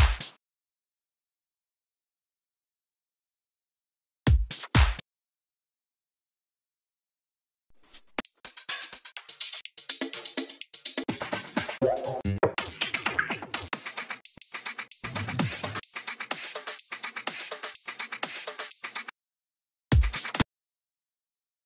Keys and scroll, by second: 0.3 super+space, 0.4 Return, 4.2 s, 4.9 space, 6.1 super+t, 19.9 s, 20.4 space.